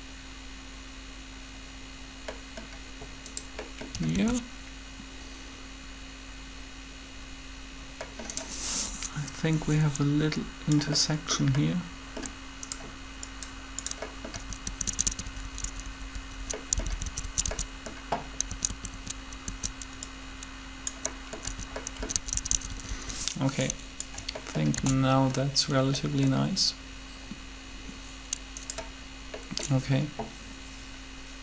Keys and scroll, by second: 4.1 alt+a, 14.3 Right, 14.6 Right, 14.7 Right, 22.0 Right, 22.0 Right, 24.7 alt+a.